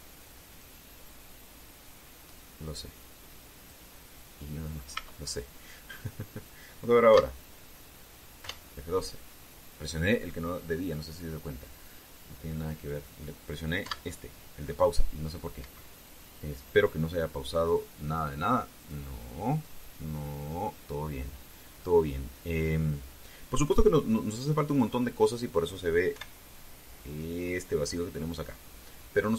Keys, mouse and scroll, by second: 2.5-4.6 drag, 5.1 scroll down 1, 5.7 Tab, 6.2-6.7 scroll down 1, 7.8 Pause, 9.1 F12, 14.5 Pause, 16.3 Escape, 18.4 click, 19.5 click, 20.3 click, 21.1 click, 23.1 scroll down 1, 26.9 F12.